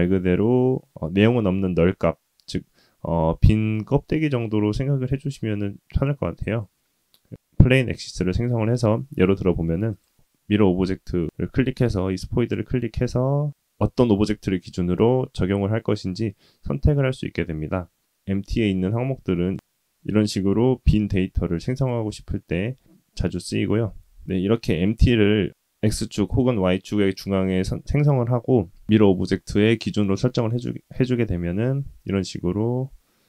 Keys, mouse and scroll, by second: 11.5 click, 13.7 click, 23.3 click, 31.7 g.